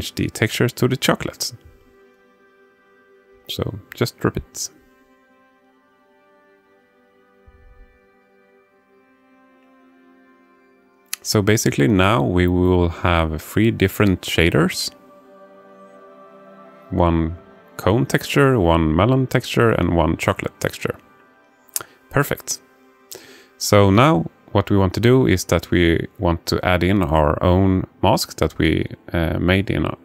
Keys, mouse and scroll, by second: 5.2 click, 9.4 click, 17.1 alt+shift+middle click, 18.0 click, 18.9 shift+click, 19.7 f, 21.9-23.3 alt+middle drag, 23.8-24.3 ctrl+scroll up 1, 25.1-27.4 alt+shift+middle drag, 27.8 click, 29.5-30.0 drag.